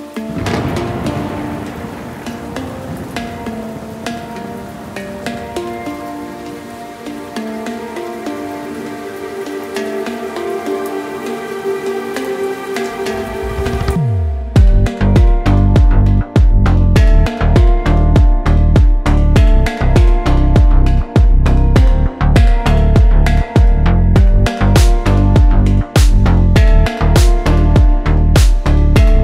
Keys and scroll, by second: 3.2 e, 5.5 s, 8.8 e, 12.6 s, 19.2 e, 23.0 e, 25.8 s.